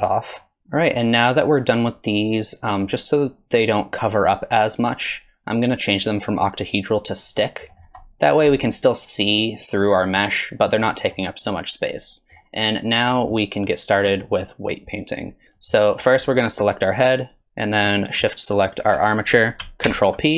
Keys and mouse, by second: 0.4 middle click, 6.0-7.2 drag, 7.7 middle click, 8.0 click, 8.6 middle click, 10.1 middle click, 11.0 drag, 12.2 drag, 13.2 click, 15.4 Tab, 15.6 click, 19.9 ctrl+p.